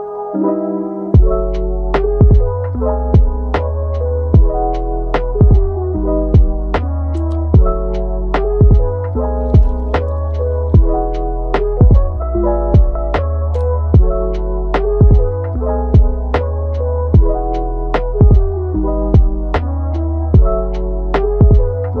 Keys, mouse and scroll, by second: 0.7 middle click, 1.2 click, 1.4 g, 3.0 click, 3.3 middle click, 4.0 click, 4.3 middle click, 4.8 g, 6.7 click, 7.1 g, 8.2-9.2 middle drag, 9.2 Tab, 9.6 scroll up 1, 9.8-10.2 middle drag, 10.2 Tab, 10.5-11.0 middle drag, 11.0 click, 11.2 g, 12.4 middle click, 12.7 g, 13.5-14.3 middle drag, 14.3 click, 15.5 middle click, 16.3-16.9 scroll down 1, 16.9 Tab, 17.3-19.0 middle drag, 19.0 scroll down 1, 19.3-19.8 middle drag, 19.8 scroll up 1, 20.1-20.6 middle drag, 20.6 scroll up 1, 20.9-22.0 middle drag.